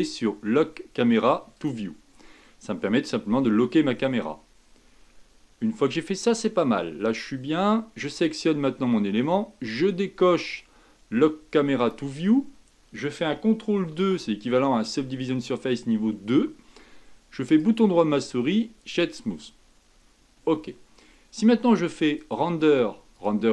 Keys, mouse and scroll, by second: 1.5 click, 2.4-5.5 middle drag, 8.1 click, 11.7 click, 13.9 ctrl+2, 17.4-20.5 right drag, 22.1-23.5 drag.